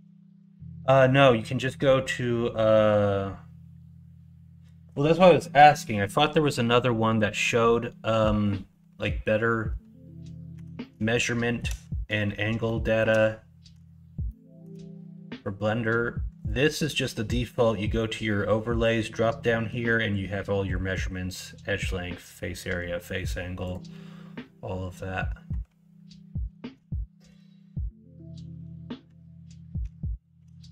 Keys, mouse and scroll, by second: 10.5 Tab, 11.1 middle click, 12.6 middle click, 14.2 shift+middle click.